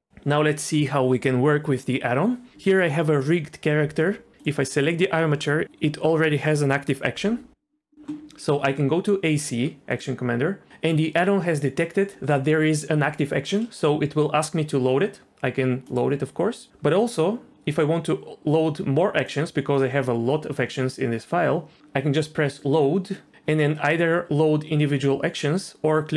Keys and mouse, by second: 9.9 click, 16.0-21.8 drag, 22.5-26.1 drag.